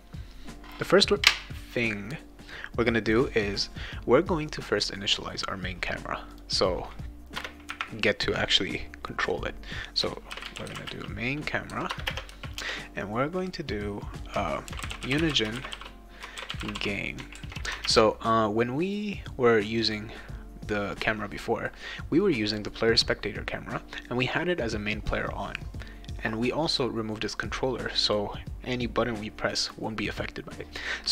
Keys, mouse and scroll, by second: 6.3 click, 7.4 Return, 10.0-12.6 typing, 11.9 Return, 14.4-17.2 typing, 17.4 ctrl+s, 17.8 alt+Tab, 20.9 click.